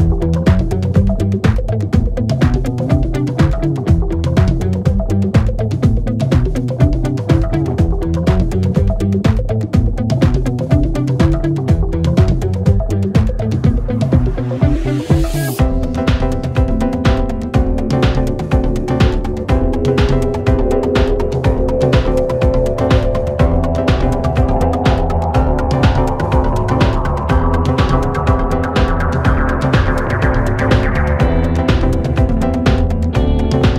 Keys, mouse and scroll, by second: 0.0 click, 0.3 click, 0.8 click, 1.3-2.9 drag, 3.1 click, 6.2 click, 6.9-8.3 drag, 8.9 click, 10.2 click, 10.7 click, 10.9 click, 12.0 click, 13.8 click, 14.4-15.9 drag, 15.9 space, 19.3 space, 19.7-20.6 drag, 20.6 g, 21.9 click, 22.4 space, 24.0 click, 24.2 click, 25.9-27.0 drag, 27.0 space, 27.2 a, 27.7 right click, 28.4 a, 28.7 g, 29.8-31.0 middle drag, 31.0-31.5 drag, 31.5 space, 33.2-33.7 middle drag.